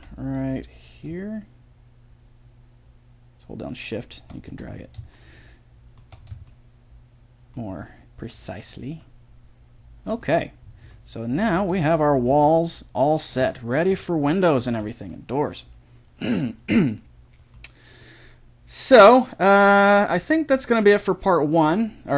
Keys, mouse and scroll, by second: 0.0 b, 1.0-3.0 drag, 4.5 a, 4.7-8.4 middle drag, 11.6 a, 12.3 a, 14.7 Tab, 17.4 middle click, 19.9-22.1 middle drag.